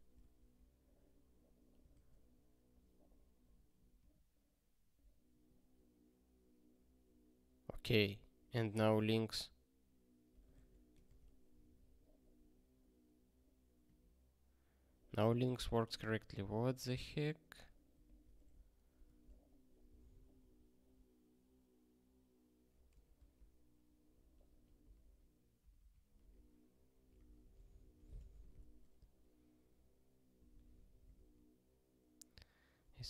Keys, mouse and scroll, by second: 23.1 ctrl+k, 24.9 super+b, 25.8 super+b, 28.1 ctrl+g, 28.6 ctrl+f, 31.1 ctrl+k.